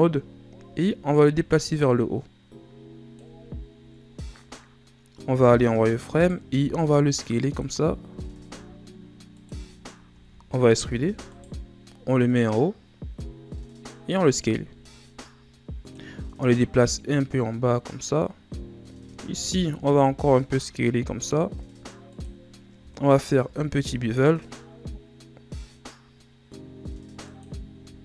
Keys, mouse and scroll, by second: 0.4-1.8 scroll up 6, 1.8-4.9 drag, 5.3 z, 6.1 right click, 6.4 b, 8.0 s, 9.8 shift+scroll up 5, 10.3-10.9 scroll down 2, 10.9 e, 12.2-14.2 drag, 14.2 s, 16.8-18.6 drag, 18.6 right click, 19.3 alt+right click, 19.9 s, 23.3 ctrl+b, 27.7 z.